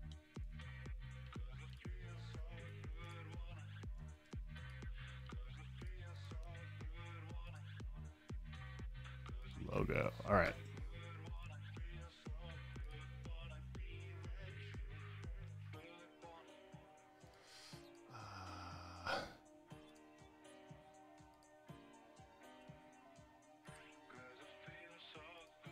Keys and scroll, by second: 0.9 super+w, 4.4 space, 14.9 super+w.